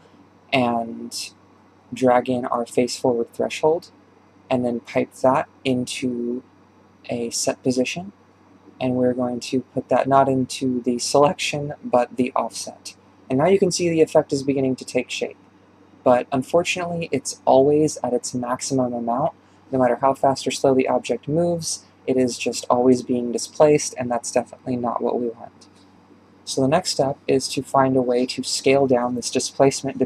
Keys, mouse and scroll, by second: 0.5-1.6 drag, 2.1-5.2 drag, 8.1 click, 12.1 click, 13.5 shift+space, 14.0-14.3 scroll down 6, 14.6-15.1 shift+middle drag, 15.1-16.4 scroll up 2, 16.4 scroll up 1, 16.7 ctrl+space, 19.6 ctrl+space, 20.2 shift+space, 20.7-21.1 shift+middle drag, 21.1-21.5 scroll up 5, 21.5-21.8 shift+middle drag, 21.8-23.7 scroll down 1, 23.7-24.3 scroll down 1, 24.3 scroll down 1, 24.4-30.0 drag.